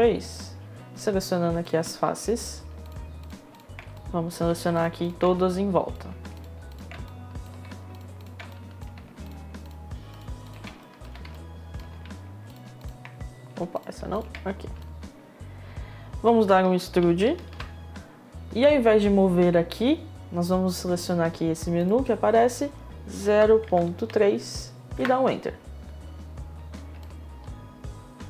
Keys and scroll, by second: 17.0 ctrl+e, 22.9 0, 24.5 Return.